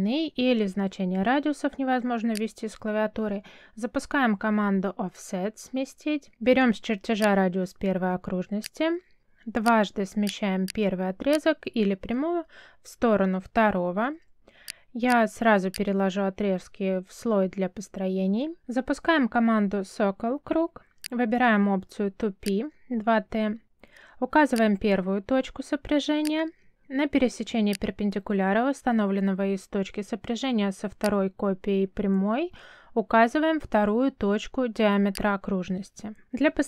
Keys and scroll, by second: 3.9 o, 5.3 space, 12.3 space, 13.3 m, 13.8 space, 16.5 space, 18.8 c, 19.7 space.